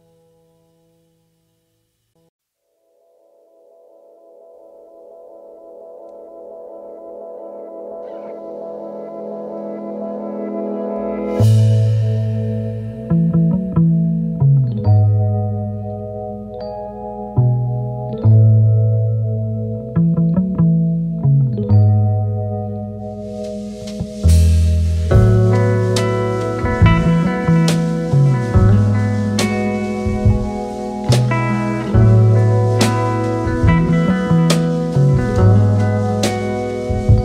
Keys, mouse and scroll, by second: 2.3 alt+Left, 6.2 alt+Left, 7.4 v, 10.8-12.4 typing, 15.1-15.9 typing, 17.1 typing, 22.5-23.2 scroll down 2, 24.4-25.1 scroll down 2, 25.1 typing, 25.4 double click, 27.5 double click, 33.1 double click, 36.4-36.8 alt+scroll up 3.